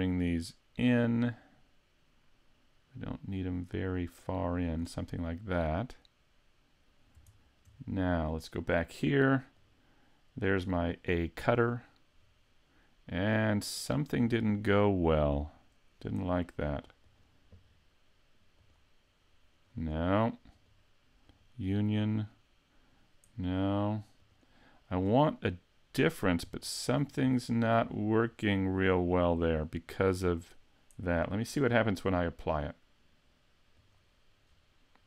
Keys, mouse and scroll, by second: 0.1 click, 5.2 middle click, 7.4 shift+middle click, 8.0 right click, 9.6 click, 13.0 middle click, 17.1 click, 19.6 middle click, 20.6 click, 22.3 middle click, 24.2 click, 25.4 middle click, 26.5-27.1 scroll up 8, 27.4 shift+middle click, 27.9-28.4 scroll down 3, 28.4 middle click, 33.8 click, 34.5-35.0 scroll down 3.